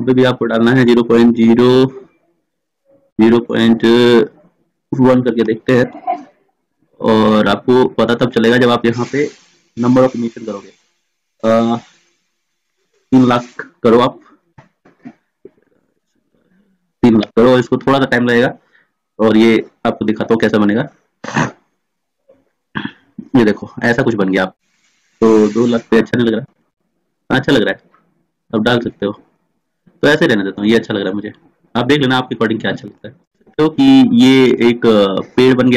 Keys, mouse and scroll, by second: 1.0 middle click, 2.5 BackSpace, 2.6 BackSpace, 7.5-14.8 drag, 14.8 0, 15.1 0, 25.9-35.6 drag.